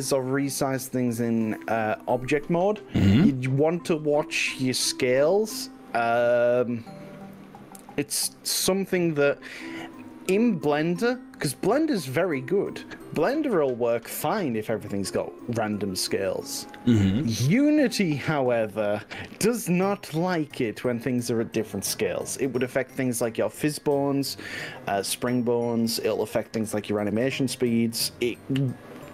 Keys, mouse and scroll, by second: 0.6-1.9 drag, 1.9-9.0 middle drag, 11.0-12.6 drag, 13.2 KP_1.